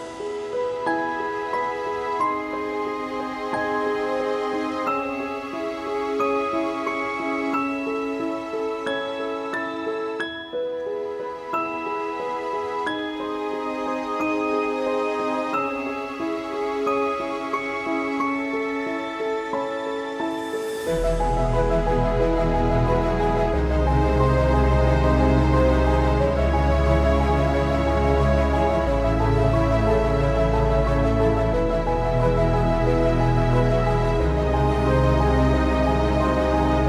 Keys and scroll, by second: 0.2-4.1 typing, 22.8 Print, 22.8 ctrl+z, 36.6 ctrl+Print.